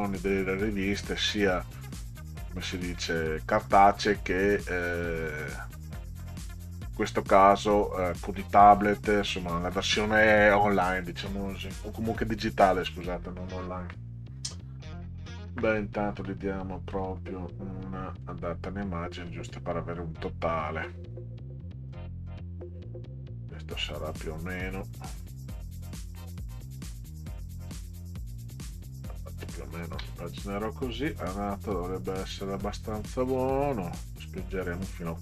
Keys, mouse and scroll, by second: 1.4-3.6 drag, 16.9 click, 18.2 click, 21.9-23.7 drag, 25.9 click, 28.1-29.3 ctrl+drag, 31.0 click, 33.1-34.5 drag.